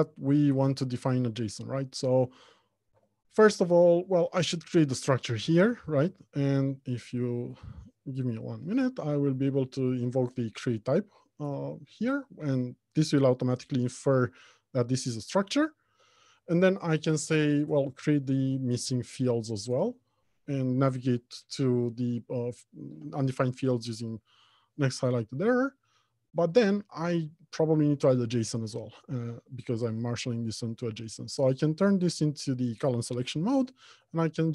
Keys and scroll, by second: 3.5 F2, 6.6 ctrl+z, 8.5 alt+Return, 16.5 F2, 26.7 alt+shift+Insert.